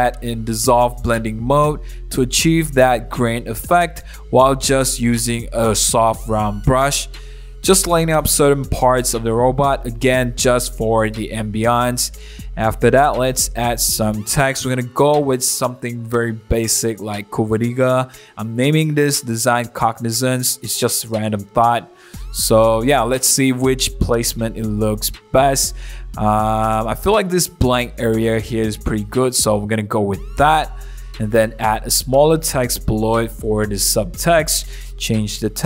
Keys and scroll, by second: 0.2 super+0, 0.2 super+-, 0.3 super+1, 0.4 super+t, 0.8 Return, 1.0 super+a, 1.1 super+BackSpace, 1.2 super+z, 1.3 super+d, 1.4-8.8 typing, 1.8 super+z, 2.4 super+0, 2.5 super+-, 2.5 super+1, 4.3 super+o, 4.4 super+-, 4.8 super+o, 4.8 super+=, 6.8 super+z, 8.6 super+z, 9.0 super+z, 10.1 super+z, 10.7 ], 11.9 super+z, 12.5 super+z, 13.4 v, 13.4 super+o, 13.6 super+-, 13.7 super+1, 13.7 b, 13.9 super+z, 15.3-21.5 typing, 16.6 super+z, 17.7 super+d, 18.5 super+0, 18.7 super+-, 21.6 Return, 22.1 super+a, 22.2 super+d, 22.3 super+t, 22.7 Return, 23.3-31.9 typing, 26.5 super+1, 31.3 super+c, 31.8 super+v, 32.1 super+0, 32.2 super+-, 32.2 super+1, 32.3 super+t, 32.8 Return, 33.2 super+0, 33.2 super+-, 33.3 super+-, 33.6 shift+Page_Down, 33.8 super+1, 34.1 BackSpace, 34.2 BackSpace, 34.2 BackSpace, 34.3 Return.